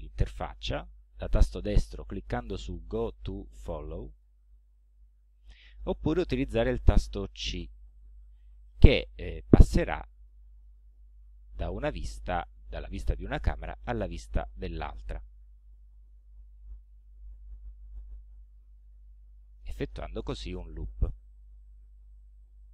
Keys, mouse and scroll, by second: 1.4 right click, 4.2 click, 7.9 c, 9.4 c, 10.3 click, 10.8 scroll down 2, 11.3 c, 13.6 c, 15.7 c, 17.6 c, 18.9 c, 19.9 c, 21.1 c, 22.2 c.